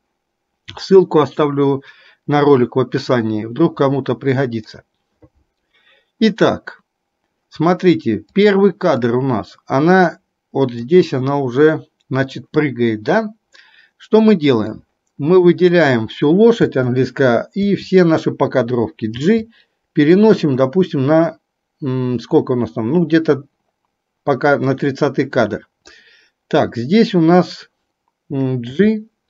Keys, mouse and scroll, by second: 3.0-7.7 drag, 9.2 click, 19.3 g, 28.8 g.